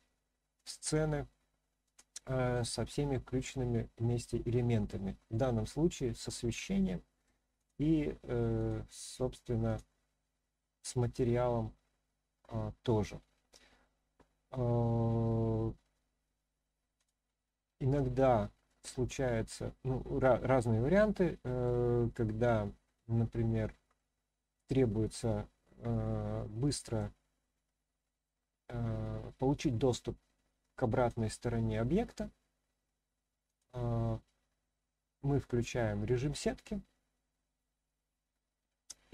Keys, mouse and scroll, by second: 1.3-1.8 shift+middle drag, 2.2-2.7 middle drag, 3.0-3.5 scroll down 1, 4.3-4.7 scroll down 3, 5.1 scroll up 3, 5.3 middle click, 6.8-7.3 middle drag, 7.5 click, 8.6 click, 9.6 click, 10.6-11.1 scroll down 1, 11.1-13.1 middle drag, 16.9 click, 18.2-18.7 shift+middle drag, 19.0-21.6 middle drag, 23.9 scroll up 1, 23.9-25.1 middle drag, 26.3-27.0 middle drag, 31.0 click, 33.4 click, 34.2-35.4 middle drag.